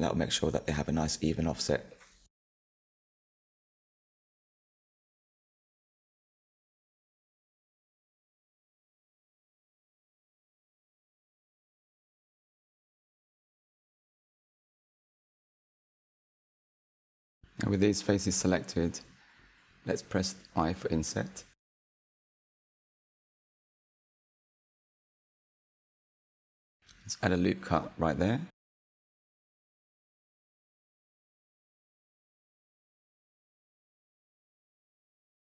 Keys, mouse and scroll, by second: 0.9-4.0 shift+drag, 5.6-12.8 middle drag, 12.8 click, 14.2 click, 14.6 shift+click, 14.9 shift+click, 15.3 shift+click, 15.8 shift+click, 16.1 shift+click, 16.5 shift+click, 16.8 shift+click, 17.3 middle click, 18.1-18.5 scroll up 3, 18.5-20.2 shift+middle drag, 20.2 i, 25.0 ctrl+r, 30.1 Tab, 30.6 scroll down 2, 32.3-33.4 middle drag, 33.4 Tab, 33.8-35.4 shift+middle drag.